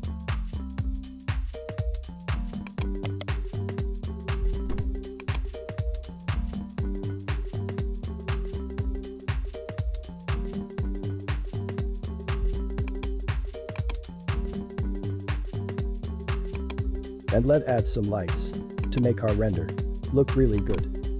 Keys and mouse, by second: 3.0 right click, 3.7 s, 14.0 click, 16.6-19.3 drag, 20.6 click.